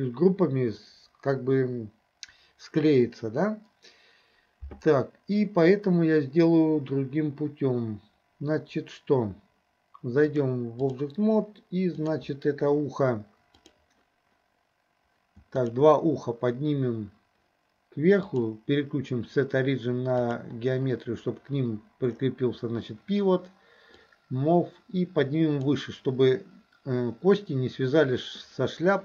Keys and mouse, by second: 10.3-11.1 drag, 12.1 click, 13.7 click, 15.6 shift+click, 18.4-20.5 drag, 24.2-25.7 drag.